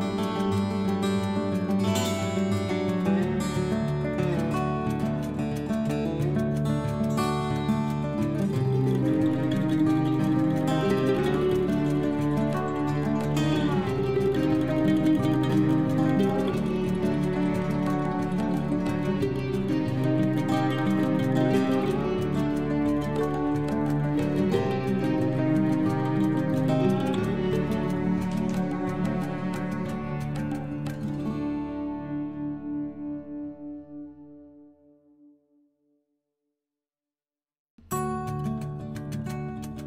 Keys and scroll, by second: 10.2 ctrl+Home, 25.5 shift+4, 31.3 b, 34.0 Left.